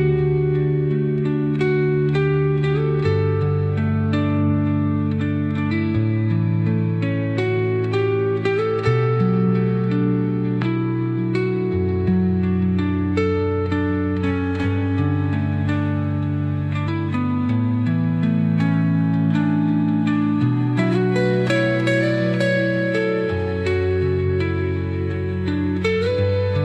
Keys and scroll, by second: 4.3 Delete.